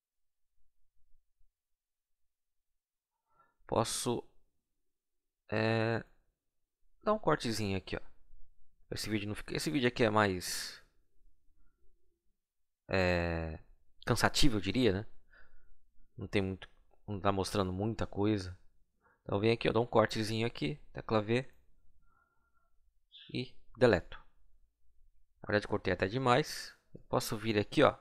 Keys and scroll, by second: 15.5 c, 20.6 v, 23.3 Delete.